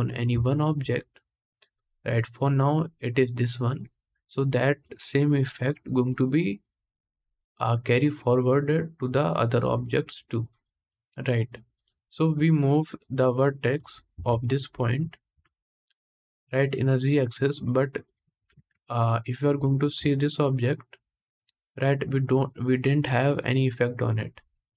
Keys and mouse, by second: 2.6 middle click, 11.6-13.1 middle drag, 13.1 click, 13.8-16.1 middle drag, 13.8 1, 15.0 Tab, 16.1-20.4 drag, 18.2 ctrl+Tab, 20.4-24.7 middle drag.